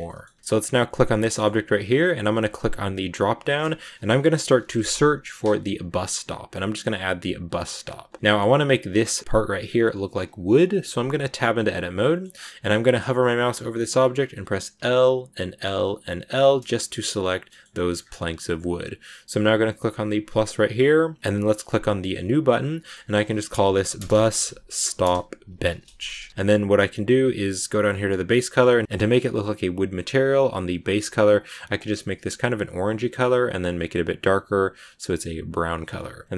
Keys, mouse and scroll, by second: 0.0 middle click, 0.2 a, 0.3 scroll up 1, 0.3 middle click, 1.0 right click, 1.2-7.4 middle drag, 7.7 scroll down 1, 7.9 a, 8.1-10.4 middle drag, 10.4 right click, 11.2 Tab, 12.0 middle click, 12.8 right click, 14.7 l, 15.5 l, 16.2 scroll down 3, 16.5-17.9 middle drag, 17.9-20.3 scroll up 2, 20.3-26.3 drag, 26.3 BackSpace, 27.7-29.9 scroll down 2, 31.3 click.